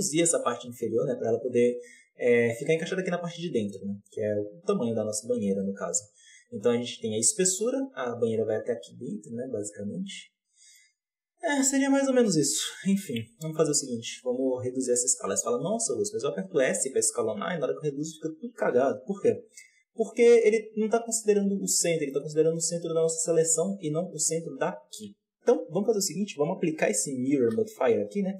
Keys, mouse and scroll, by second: 1.1-1.5 scroll up 3, 10.4 scroll down 3, 10.6-12.5 middle drag, 12.5 KP_7, 13.0-13.7 scroll up 1, 13.7 s, 21.7-23.6 middle drag, 23.6-25.0 drag, 25.0 Tab, 26.6 click, 27.2 ctrl+a.